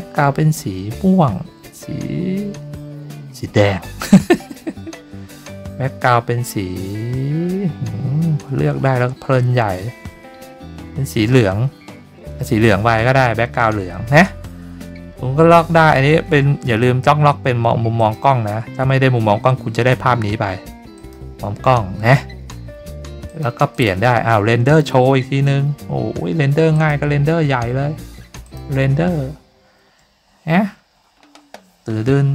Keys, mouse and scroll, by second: 17.9 click, 20.9 click, 23.2 click, 23.7 click, 26.7 click, 28.4 click.